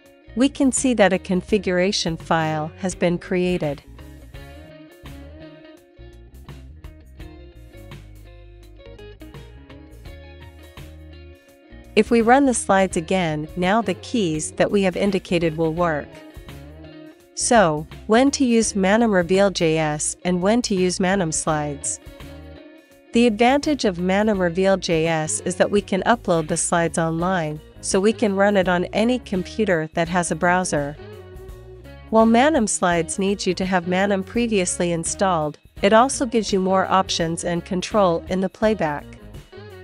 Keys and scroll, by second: 4.2-7.2 typing, 7.6 Return, 9.0 Down, 9.5 Down, 10.0 Down, 10.1 Page_Down, 10.2 Down, 10.3 Down, 10.5 Down, 10.7 Up, 11.0 Up, 12.3 Return, 14.0 Return, 18.4 space, 22.4 space, 25.7 space, 28.3 Left, 30.7 Up, 32.8 Down, 34.6 Up, 36.6 Down, 38.5 space.